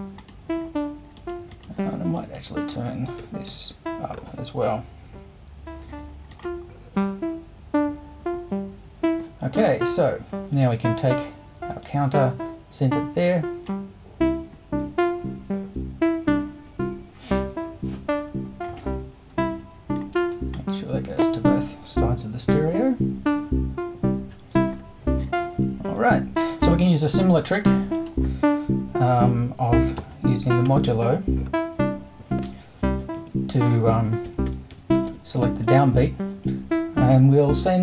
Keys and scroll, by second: 3.2 BackSpace, 3.5 5, 26.7 super+i, 30.0 shift+5, 30.5 shift+space, 30.7 4, 33.2 super+i, 34.5 e, 34.7 l, 35.1 space, 35.9 0.